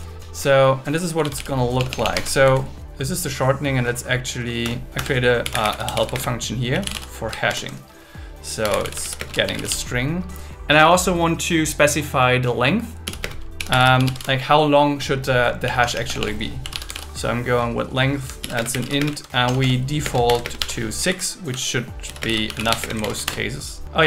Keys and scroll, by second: 1.8 BackSpace, 2.1 Escape, 2.4 Down, 4.6 Return, 6.7 space, 7.5 shift+8, 9.2 shift+space, 9.3 shift+s, 13.2 space, 15.6 BackSpace, 18.4-20.4 typing, 21.1 Right, 21.8-22.8 typing, 23.2 Return.